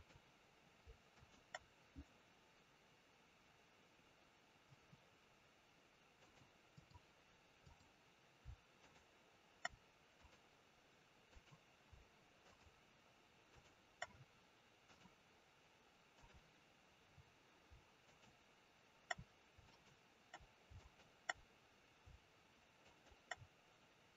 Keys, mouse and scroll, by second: 1.0 shift+click, 6.1 click, 7.5 click, 8.7 shift+click, 9.6 shift+click, 10.0 click, 11.2 click, 12.3 shift+click, 14.8 click, 17.0-17.6 scroll up 2, 18.0 shift+click, 20.0 shift+click.